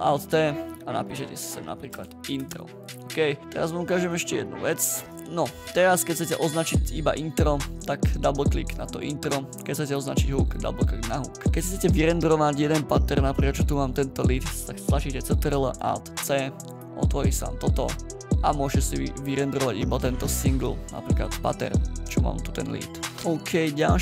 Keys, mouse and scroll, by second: 1.2-2.4 typing, 4.1 click, 5.1 Return, 8.8 click, 10.6 click, 15.3 ctrl+alt+c, 16.2 ctrl+alt+c, 16.6 ctrl+alt+c.